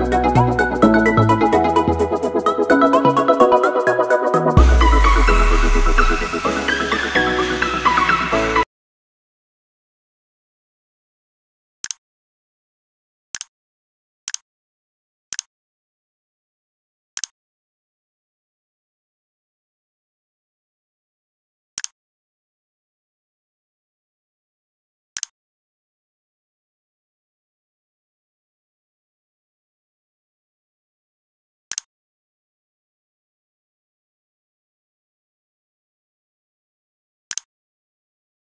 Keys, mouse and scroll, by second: 2.4 click, 3.1 c, 3.8 click, 5.1 v, 5.4 v, 5.9 v, 5.9 click.